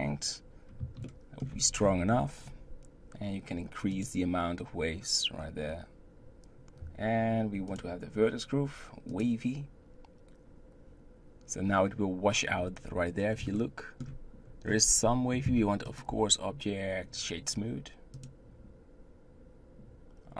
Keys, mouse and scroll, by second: 1.0-1.5 shift+middle drag, 1.5-2.1 scroll up 5, 3.9-6.6 drag, 7.7-10.7 drag, 11.7 scroll down 1, 12.5-13.5 scroll up 4, 13.5-14.4 shift+middle drag, 14.4-15.9 scroll up 1, 15.9-19.5 drag.